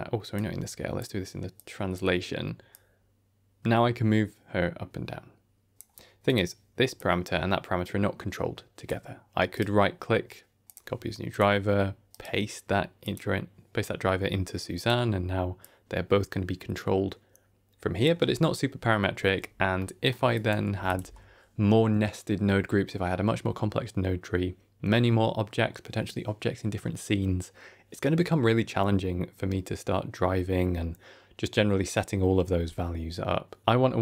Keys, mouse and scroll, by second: 0.2 click, 1.4 click, 2.6-5.7 drag, 6.1 click, 6.8-8.8 drag, 9.4-10.7 right drag, 11.2 click, 12.0-13.0 right drag, 14.7 click, 15.5-18.0 drag, 19.3-19.7 scroll down 2, 19.7 middle click, 20.2 click, 20.6 g.